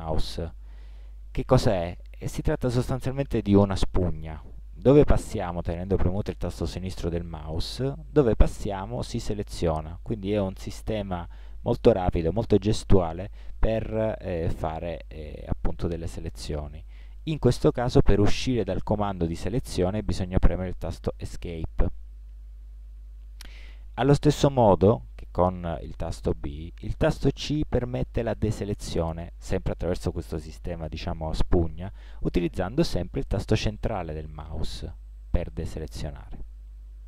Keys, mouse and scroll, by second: 27.5 c.